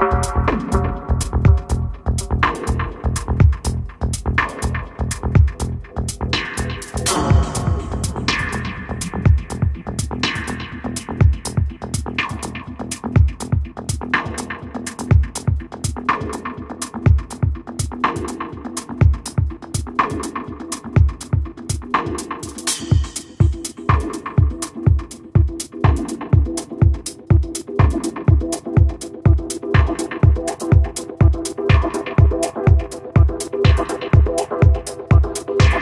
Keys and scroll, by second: 2.3-3.4 typing, 30.6 1, 32.0 f.